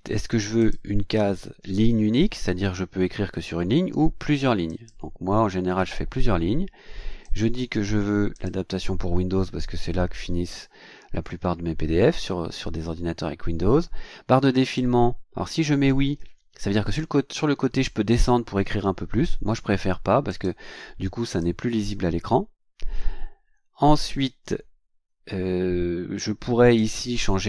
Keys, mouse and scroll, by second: 0.6 click, 4.7 click, 7.2 click, 8.3 click, 14.6 click, 20.3 click, 21.2 click, 26.2 click.